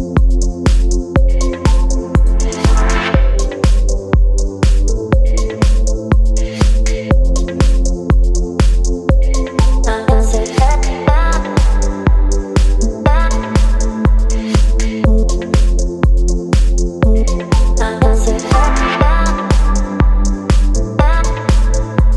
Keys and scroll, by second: 0.4 [, 1.6 [, 2.5 [, 6.0 space, 8.4 space, 13.9 space, 16.4 [, 16.6 [, 16.7 [, 16.9 [, 18.5 [.